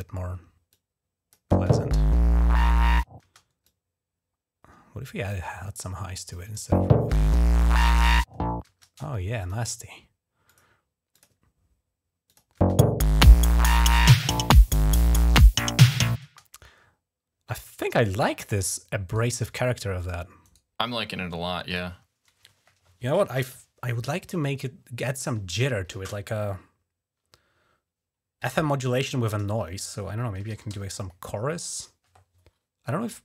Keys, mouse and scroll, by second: 0.5 click, 1.3 space, 3.2 space, 3.4-5.1 drag, 5.4-6.1 scroll up 3, 6.1 click, 6.5 space, 8.5 space, 9.1 click, 10.2 click, 10.9 click, 12.1 click, 12.2 click, 12.3 space, 16.0 space, 19.8 click, 20.3 right click, 21.4 click, 29.9-31.0 typing.